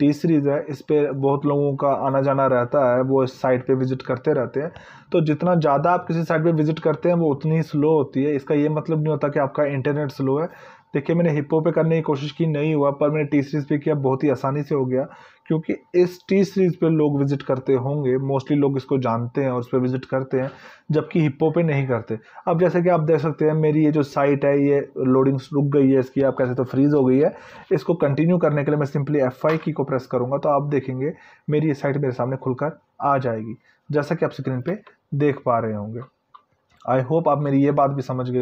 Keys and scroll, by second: 29.6 F5.